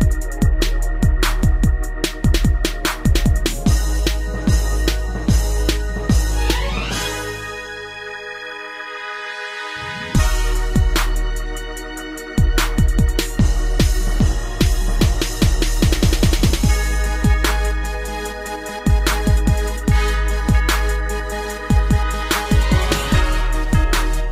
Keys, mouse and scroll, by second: 0.7 click, 2.0 shift+space, 3.0 Escape, 3.3 scroll down 3, 3.6 middle click, 3.9 shift+space, 5.5 Escape, 5.7 middle click, 7.0 click, 10.6 b, 11.1 click, 12.7 Right, 13.4 ctrl+c, 13.7 Up, 14.0 ctrl+v, 14.5 Down, 14.9 Down, 15.8 shift+space, 17.1 Escape, 17.2 scroll down 3, 17.7 middle click, 18.4 shift+space, 20.0 Escape, 20.4 ctrl+s, 20.7 scroll down 1, 21.1 shift+middle click, 21.2 shift+middle click, 22.0 middle click.